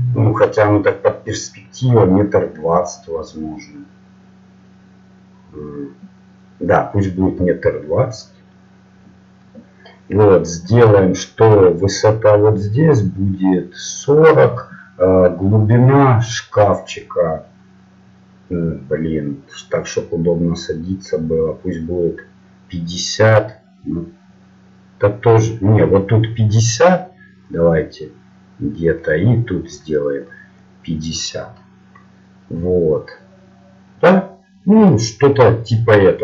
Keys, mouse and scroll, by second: 0.0-36.2 typing, 1.1-6.5 drag.